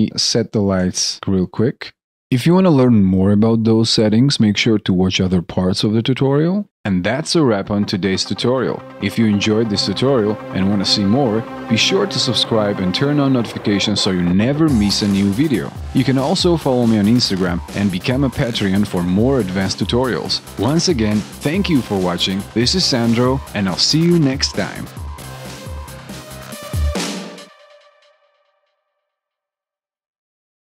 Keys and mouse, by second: 0.1 alt+right click, 0.1 alt+middle click, 2.3 ctrl+click.